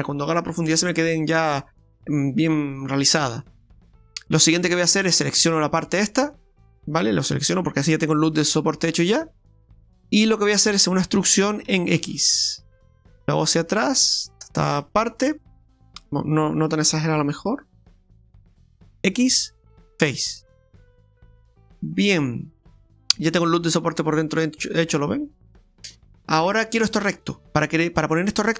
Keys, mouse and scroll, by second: 3.4 middle click, 5.6 alt+shift+right click, 6.3 middle click, 8.2 middle click, 11.1 e, 14.7 middle click, 16.8 click, 17.8 middle click, 19.0 x, 20.5 middle click, 25.3-25.8 scroll up 3, 25.9 shift+middle click, 26.4 scroll down 1, 26.9 middle click.